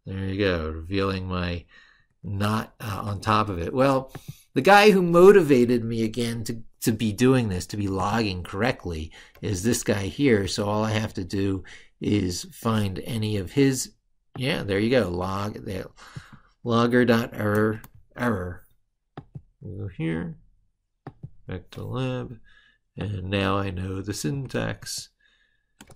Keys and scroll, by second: 1.8 ctrl+super+Right, 17.3 ctrl+c, 21.1 ctrl+c, 24.6 ctrl+v.